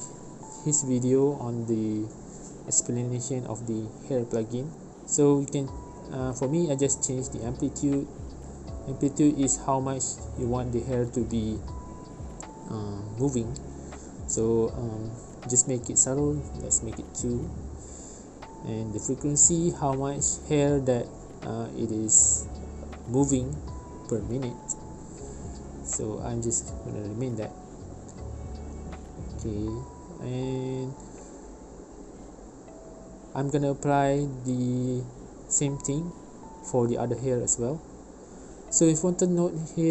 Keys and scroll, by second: 12.6 space, 14.8 space, 21.4 space, 23.8 space.